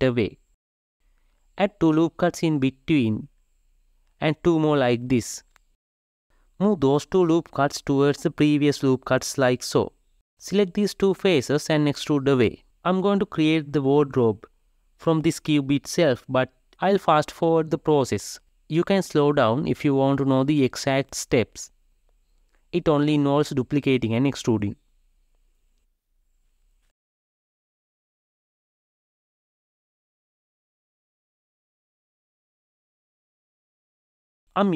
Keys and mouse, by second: 0.0 e, 2.3 ctrl+r, 4.1 ctrl+r, 6.9 g, 9.7 alt+click, 10.9 3, 11.0 click, 11.6 e, 12.9 click, 13.3 shift+click, 13.7 KP_3, 14.2 alt+z, 16.7 alt+z, 17.5 ctrl+r, 18.2 3, 18.5 shift+click, 19.1 x, 20.2 shift+click, 20.3 e, 21.2-22.8 drag, 24.7 click, 25.0 shift+d, 26.7 e, 27.1 click, 28.0 shift+middle click, 28.1 shift+d, 29.6 shift+click, 29.8 shift+d, 30.6 shift+r, 30.9 Left, 31.0 click, 31.9 shift+Left, 32.1 shift+r, 32.1 shift+Left, 32.2 shift+r, 33.0 shift+Left, 34.0 Tab, 34.4 shift+right click.